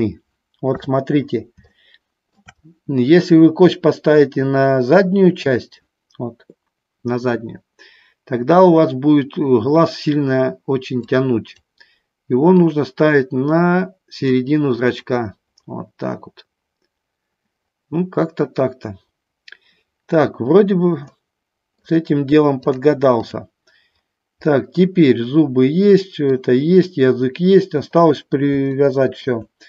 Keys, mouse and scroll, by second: 1.0 KP_3, 2.0 middle click, 11.2 click, 12.8-14.5 drag, 21.3 middle click, 22.8 click, 24.7-26.4 middle drag, 28.9 shift+middle click.